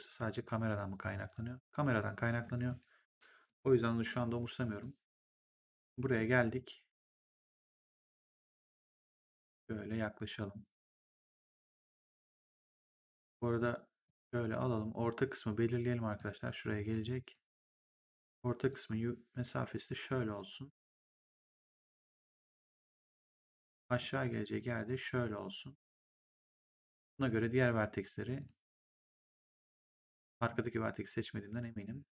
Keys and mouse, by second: 2.6 right click, 3.4 click, 4.7 click, 5.9 w, 7.6 click, 8.8 click, 13.5 click, 14.9 click, 16.9 click, 18.6 click, 23.6 click, 26.9 click, 28.3 click, 30.0 click.